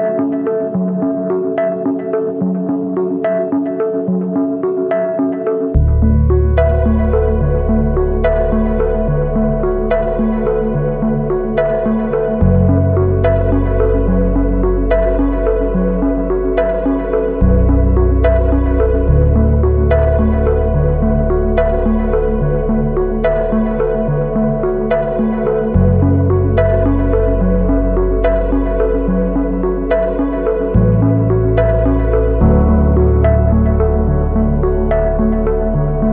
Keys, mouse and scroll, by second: 0.1 Right, 0.3 Right, 0.6 Down, 0.9 Right, 1.3 Down, 1.9 space, 3.0 alt+click, 5.0 alt+click, 8.1-9.0 scroll down 1, 9.2 alt+click, 11.8 Left, 12.0 Up, 12.2 Up, 13.2 ctrl+-, 13.4 ctrl+-, 13.8 ctrl+-, 14.4 space, 15.8 ctrl+-, 21.9 right click, 24.8 double click.